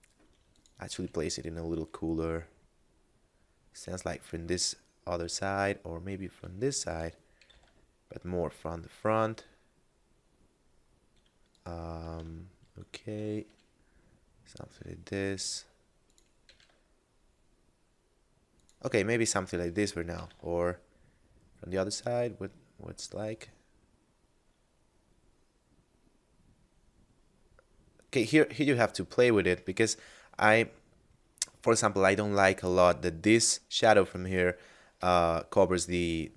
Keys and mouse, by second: 0.6 click, 1.0 r, 6.9 click, 7.4 r, 7.6 z, 11.6 click, 12.4 shift+middle click, 13.5 r, 16.1 click, 16.5 r, 16.6 z, 18.6 click, 19.9 r, 20.3 z, 29.1 click, 35.0 r, 35.2 z.